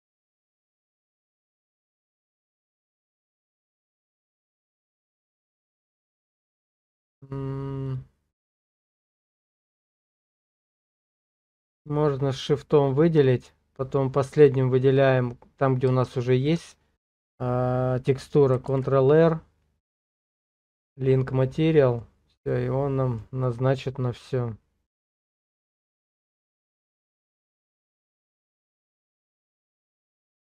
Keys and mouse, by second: 1.5 click, 4.4 click, 6.1 middle click, 7.9 click, 9.1 middle click, 10.5 middle click, 11.8 shift+click, 16.2 shift+click, 18.7 ctrl+l, 21.4 middle click, 22.5 middle click, 23.6-26.4 middle drag, 26.9 click, 29.3 ctrl+l.